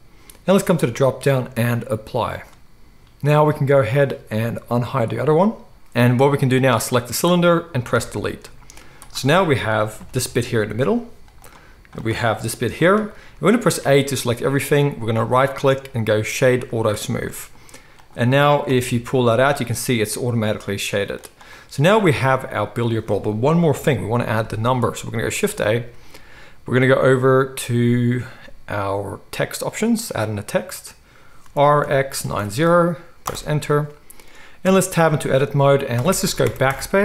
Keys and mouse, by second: 0.9-5.4 drag, 5.4-6.8 middle drag, 6.8 click, 7.9 Delete, 7.9-9.0 middle drag, 9.0 click, 9.2-11.9 middle drag, 9.9 g, 11.9 click, 12.0-15.2 middle drag, 12.3 g, 13.8 a, 15.2-21.4 drag, 18.7 g, 21.4-22.3 middle drag, 22.0 alt+a, 23.7 KP_1, 25.4 shift+a, 31.4 r, 34.6 Tab, 35.9-37.0 typing.